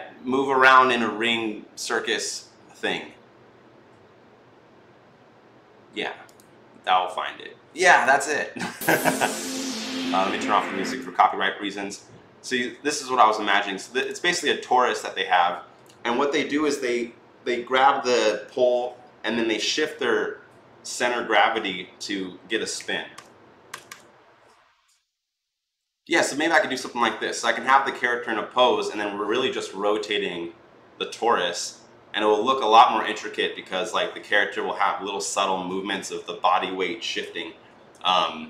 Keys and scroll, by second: 22.6 Right, 23.0 Right, 23.5 Right, 23.6 Right.